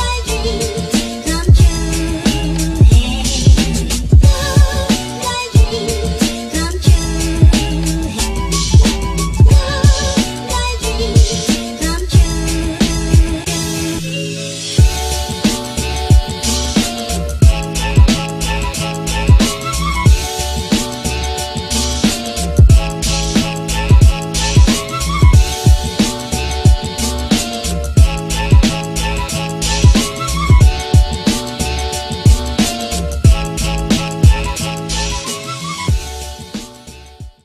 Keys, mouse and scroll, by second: 7.3 space.